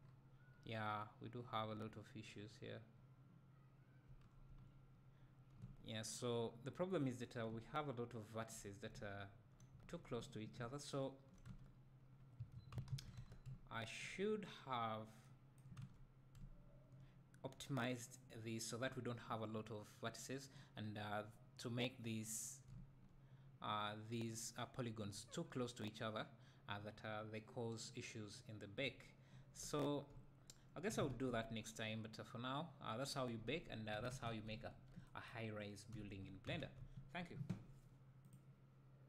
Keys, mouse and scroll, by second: 4.3 Tab, 4.7 Tab, 6.9 scroll up 1, 7.5 `, 10.8 `, 11.6 Tab, 12.2-12.7 scroll down 2, 12.7-13.2 scroll down 1, 13.2 Tab, 13.5 `, 14.8 scroll up 2, 15.9 Tab, 16.4 `, 17.5-17.8 scroll up 1, 18.4 scroll down 1, 18.9 `, 27.1-28.2 scroll down 2, 28.2-28.8 scroll down 1, 28.8-29.4 scroll down 1, 29.5 Tab, 30.1 `, 36.0 `.